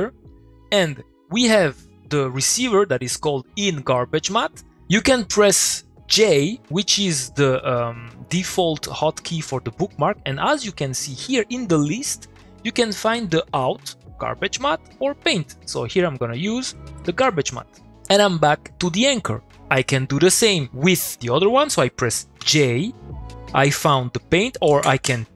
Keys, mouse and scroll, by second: 0.3 middle click, 4.4 middle click, 4.9 click, 6.2 j, 16.7 click, 22.4 j.